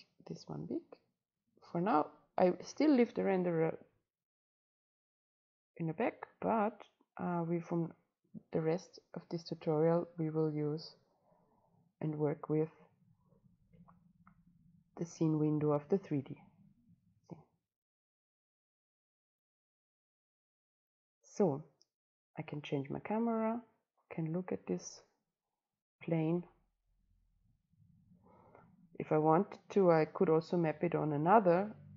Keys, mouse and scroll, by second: 3.5 click, 8.7 click, 8.9 click, 9.3 click, 9.5 click, 9.7 click, 20.2-23.1 drag, 23.1-24.2 right drag, 24.2-25.5 drag, 25.5-26.7 right drag, 26.7 click, 29.0-31.9 drag.